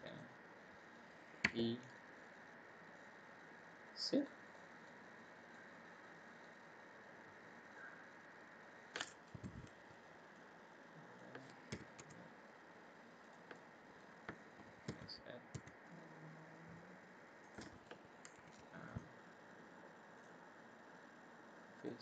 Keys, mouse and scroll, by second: 0.6-1.1 scroll down 1, 1.4 e, 4.5 middle click, 5.5 middle click, 7.7 click, 10.3 click, 11.7 s, 13.5 middle click, 14.8 s, 18.3 ctrl+r, 21.7 click.